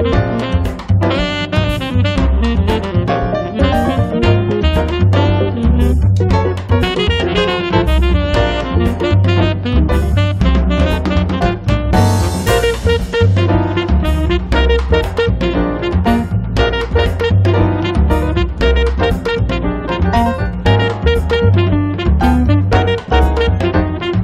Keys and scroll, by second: 5.0 p, 8.6 f, 10.2 space, 11.5 f, 12.7 6, 13.1 Return, 13.9 p, 14.5 space, 15.6 p, 18.3 space, 21.2 r.